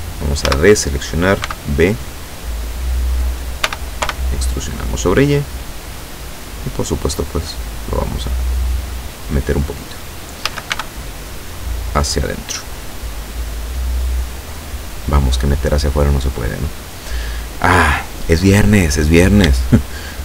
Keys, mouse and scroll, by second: 0.5 a, 1.5 b, 2.1 click, 3.7 e, 4.1 y, 6.5 click, 7.1-9.3 drag, 10.5 a, 10.7 b, 11.1-12.1 drag, 12.7-14.4 drag, 18.9-19.3 scroll down 1, 19.6-20.2 shift+middle drag.